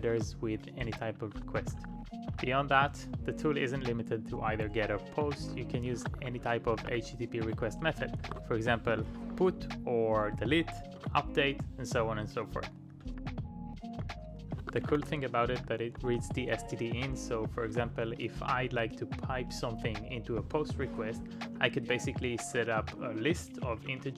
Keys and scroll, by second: 0.0-3.3 typing, 5.7-9.1 typing, 10.5 space, 11.0 super+v, 13.1-15.8 typing, 17.6-20.3 typing, 21.3-23.8 typing.